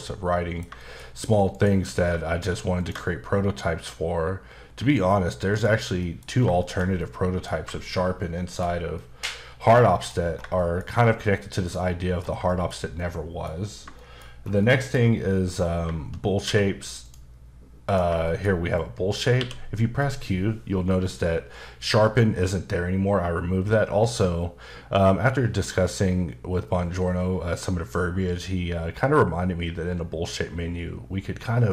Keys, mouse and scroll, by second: 0.8 shift+middle click, 1.0-1.5 scroll up 2, 1.5 click, 1.7 q, 2.8 ctrl+shift+click, 5.5 click, 6.0 middle click, 6.3 scroll down 2, 6.6 shift+middle click, 7.8 shift+middle click, 9.7 KP_Decimal, 10.2 scroll up 1, 10.5 shift+middle click, 11.0 scroll up 1, 11.2 middle click, 12.1 scroll down 2, 12.2 scroll up 1, 12.5 shift+middle click, 14.0 shift+middle click, 14.4 scroll down 1, 14.6 middle click, 15.3-15.8 scroll up 1, 16.4 q, 17.0 click, 17.8 click, 18.2 shift+middle click, 19.4 q.